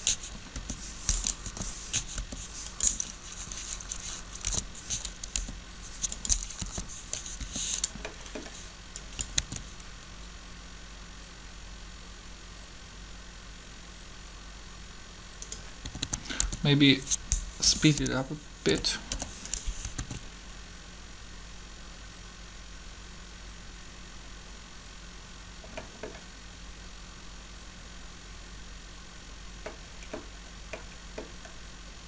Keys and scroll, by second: 0.5 Up, 2.2 r, 4.3 Up, 5.3 r, 6.6 Up, 7.4 r, 9.3 alt+a, 15.8-19.1 typing, 20.0 alt+a.